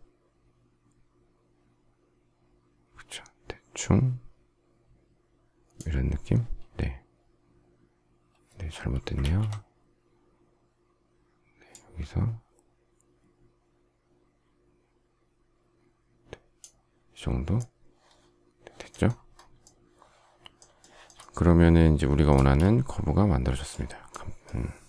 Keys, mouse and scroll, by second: 9.2 ctrl+z, 20.8 shift+middle click, 22.3 space.